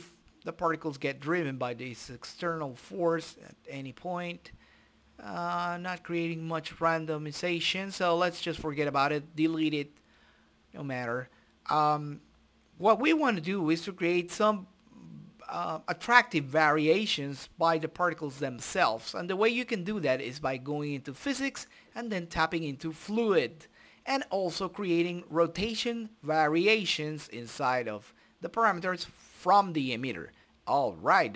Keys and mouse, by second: 0.1 i, 1.3 click, 2.5-4.0 drag, 4.0 i, 5.0-6.3 drag, 6.7-8.5 drag, 8.9-12.3 drag, 14.8-15.8 drag, 17.0-18.3 right drag, 18.5-19.5 drag, 19.5 right click, 21.0 click, 21.2 right click, 24.1-25.3 drag, 25.7 click, 26.7-29.7 drag, 30.2-31.2 drag.